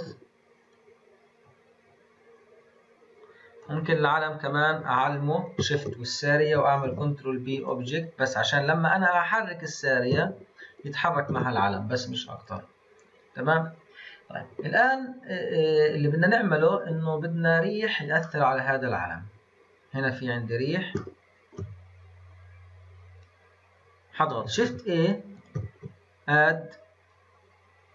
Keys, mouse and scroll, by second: 0.7-3.7 drag, 5.7 shift+click, 6.8 ctrl+p, 8.4 drag, 8.9 click, 10.1 g, 11.2 ctrl+z, 12.0 click, 12.3 click, 17.1-18.2 scroll down 4, 18.2-19.5 middle drag, 19.5-20.2 scroll down 1, 20.2-21.0 scroll up 2, 21.0-24.5 shift+middle drag, 24.5 shift+a, 25.3 click, 25.6 shift+a.